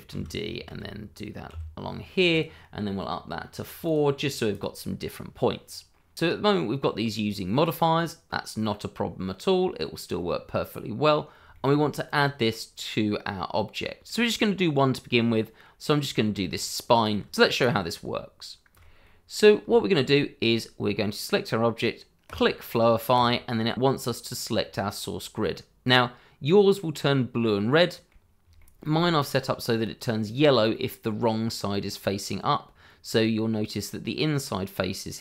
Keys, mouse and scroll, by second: 0.1 shift+d, 0.6 x, 1.5 y, 2.3 click, 3.8 double click, 4.5 click, 5.7-6.3 scroll up 1, 6.3 middle click, 6.9 click, 7.2-7.5 scroll down 1, 7.5 click, 7.9-9.1 scroll up 1, 11.5 shift+middle click, 12.0 click, 12.5 middle click, 14.1 shift+middle click, 14.5 click, 15.4 middle click, 16.5 shift+middle click, 17.3-17.9 scroll up 1, 18.1 shift+middle click, 19.0 middle click, 19.7 shift+middle click, 20.4-21.2 scroll down 1, 22.2 click, 26.7 middle click, 28.5 shift+middle click, 31.4 middle click.